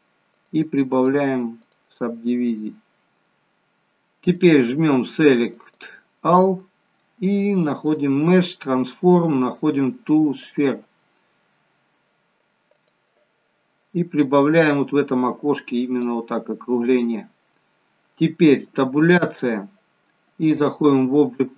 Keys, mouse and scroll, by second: 4.2 click, 7.7 click, 14.6 click, 19.3 Tab, 20.5 click.